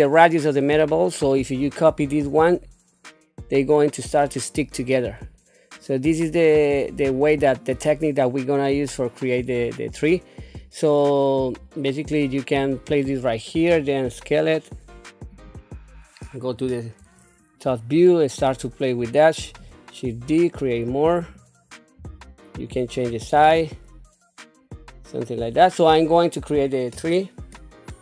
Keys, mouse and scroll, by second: 2.0 shift+d, 13.7 s, 16.5 KP_7, 17.7 shift+middle click, 19.4 shift+d, 22.0 s, 23.3 shift+d, 26.9 KP_1.